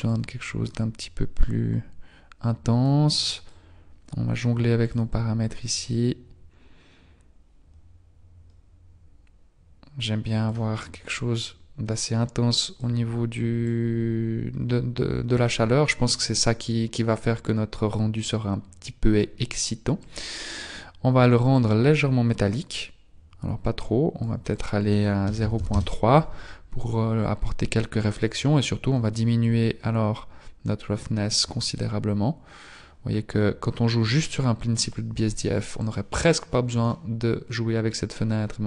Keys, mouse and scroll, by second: 36.0 click, 37.5-37.9 scroll up 1.